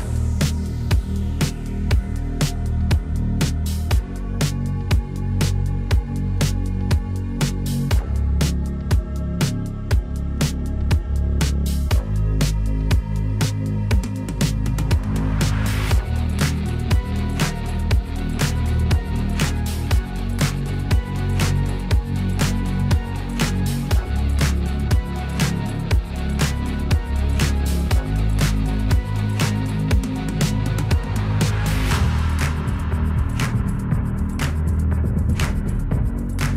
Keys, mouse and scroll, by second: 14.3 click, 15.4 ctrl+shift+d, 16.0 click, 19.0 ctrl+shift+d, 19.8-36.4 drag.